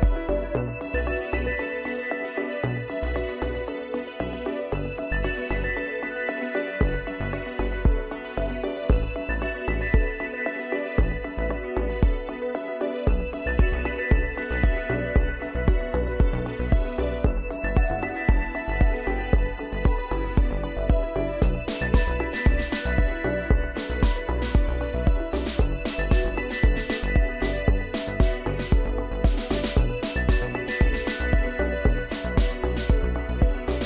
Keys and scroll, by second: 14.9 ctrl+z, 28.1 ctrl+space, 29.4 ctrl+space, 31.6 ctrl+0.